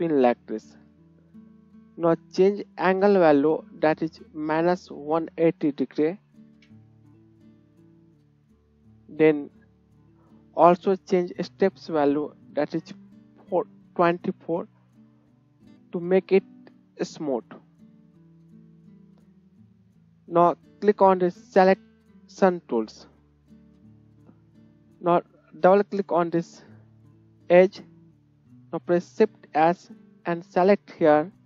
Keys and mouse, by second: 6.7-8.9 drag, 6.7-8.9 middle drag, 6.7-8.9 right drag, 9.3-19.0 drag, 9.3-18.4 middle drag, 9.3-18.4 right drag, 19.0 right click, 19.2 click, 19.4-21.5 right drag, 21.3 click, 21.3-26.0 middle drag, 22.5-26.3 drag, 22.5-26.0 right drag, 26.1 middle click, 26.1 right click, 26.9 KP_1, 28.6 shift+right click, 29.3 shift+s.